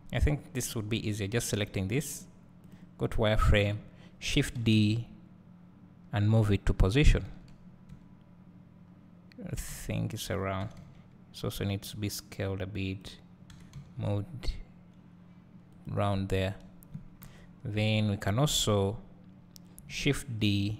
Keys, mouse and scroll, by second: 0.7 scroll down 1, 1.6 Tab, 2.8 click, 3.0 scroll down 1, 4.7 shift+d, 8.2 `, 10.8 s.